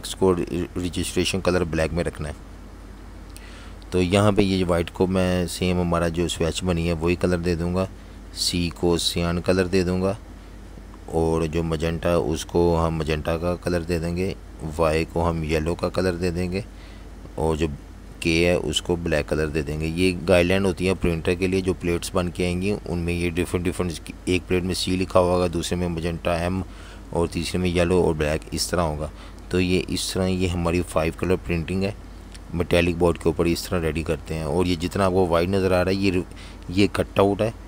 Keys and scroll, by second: 0.5 v, 21.0 super+0, 23.2 z, 24.7 v, 24.8 space.